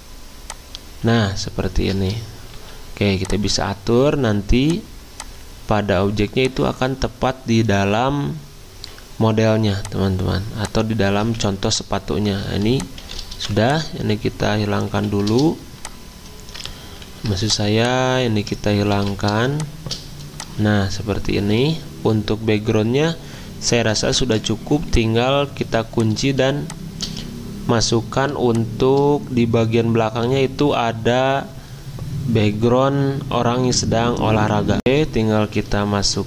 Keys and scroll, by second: 2.5 g, 11.2 z, 12.6 v, 14.9 ctrl+2, 17.1 ctrl+alt+2, 18.9 ctrl+3, 25.3 ctrl+2, 25.6 z, 34.8 alt+Tab, 35.6 alt+Tab, 36.1 alt+Tab.